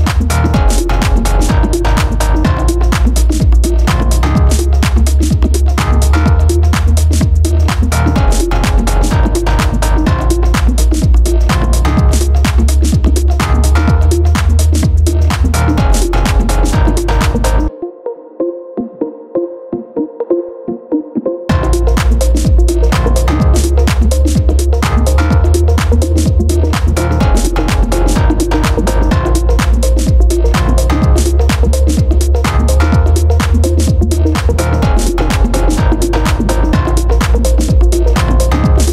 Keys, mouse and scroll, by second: 1.2-4.2 drag, 6.6-8.1 middle drag, 8.1 s, 11.5-12.5 middle drag, 12.5 click, 14.2-17.2 drag, 19.1-19.9 scroll down 1, 19.9-20.9 scroll up 2, 21.0-22.9 shift+middle drag, 22.9 click, 23.7 drag, 25.6 click, 26.3-29.0 drag, 29.7 click, 30.8-33.8 drag, 34.1 click, 35.5-38.5 drag.